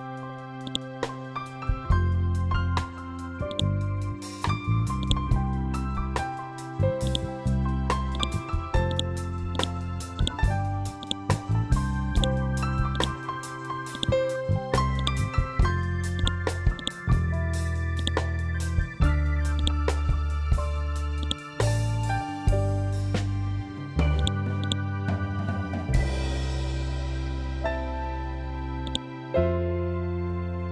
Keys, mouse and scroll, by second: 0.1 click, 0.6 Down, 2.2 scroll down 1, 3.0 click, 3.6 scroll up 1, 4.5 click, 5.0 scroll down 1, 6.5-15.6 drag, 19.0-23.6 ctrl+drag, 24.4 scroll down 1, 28.2 ctrl+Num_Lock, 28.2 scroll up 1, 28.3 ctrl+click, 29.2 ctrl+z.